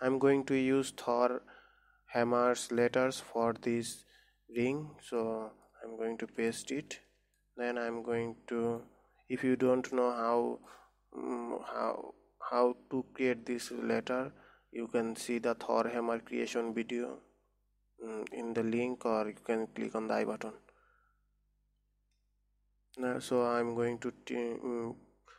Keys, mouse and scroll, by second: 5.7-6.8 middle drag, 6.8 ctrl+v, 7.5 middle click, 8.2 Tab, 9.1 click, 10.4-13.5 middle drag, 23.4 click, 23.9-25.3 middle drag.